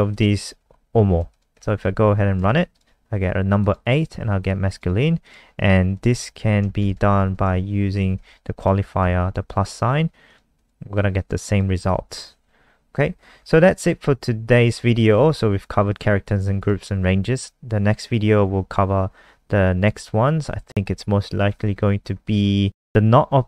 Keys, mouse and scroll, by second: 0.1 shift+click, 1.1 ctrl+s, 1.3 click, 1.5 F5, 2.5 alt+click, 3.6 click, 4.4 alt+click, 5.2 click, 6.5 Right, 6.8-7.5 typing, 8.1 ctrl+s, 8.5 click, 9.0 F5, 10.2 click, 10.5 click, 11.4 click, 13.3-14.9 scroll up 2, 14.9 click, 20.6 scroll up 10, 20.7-23.4 scroll down 2.